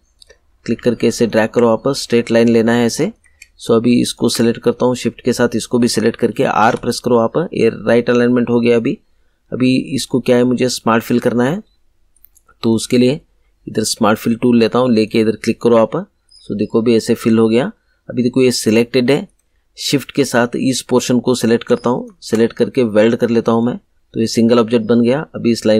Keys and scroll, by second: 6.6 r.